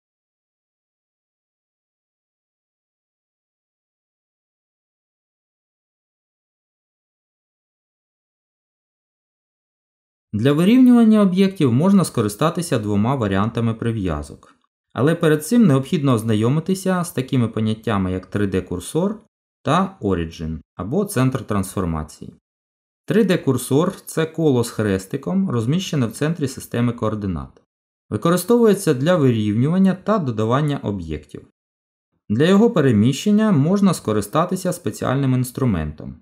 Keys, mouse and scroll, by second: 2.1 Delete, 3.3-4.1 scroll up 3, 5.1 shift+a, 7.8 middle click, 15.5 g, 18.9 middle click.